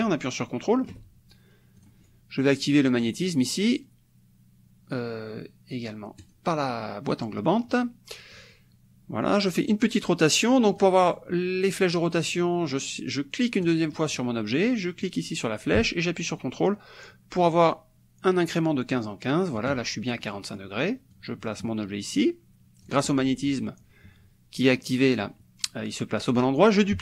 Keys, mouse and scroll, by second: 1.8 click, 3.2 click, 6.3 click, 7.5 click, 8.4 click, 9.2 click, 10.8 click, 13.6 click, 15.0-19.8 drag, 20.4 middle click, 21.2-23.1 drag.